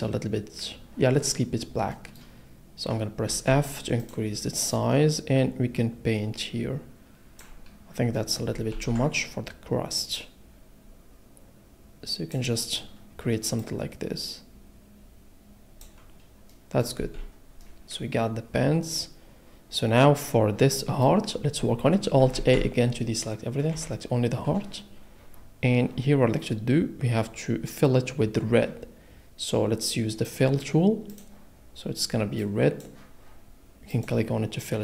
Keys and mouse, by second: 3.3 f, 4.0 click, 4.7 click, 9.1 ctrl+z, 17.0 a, 22.3 alt+a, 23.7 l, 26.1 middle click, 30.2 click, 31.1 click, 33.9 click.